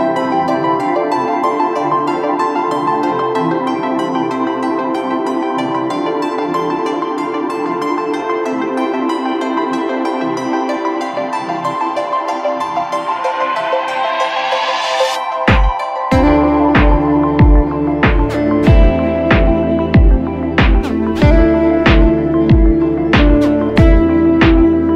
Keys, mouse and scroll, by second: 4.7 Right, 4.9 Right, 5.3 Right, 5.4 Right, 7.3 Return, 7.3 Right, 23.9 ctrl+click.